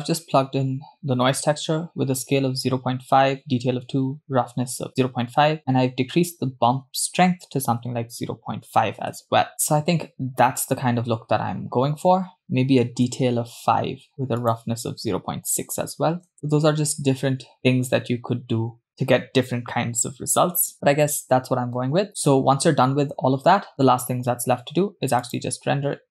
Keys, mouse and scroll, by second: 5.6-9.5 drag, 12.4 click, 14.8-16.3 drag, 16.3 scroll up 1, 21.5-22.3 scroll down 1, 22.3-24.1 scroll down 1, 25.4-26.1 drag.